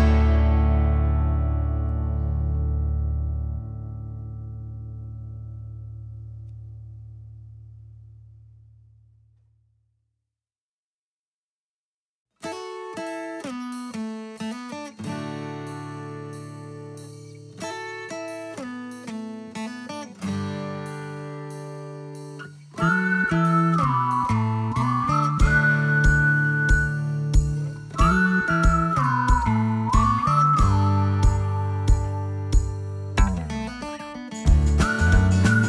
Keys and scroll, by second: 11.1 b, 12.9-15.2 typing, 15.4 Escape, 28.1 F5, 31.8 space, 33.2 ctrl+s.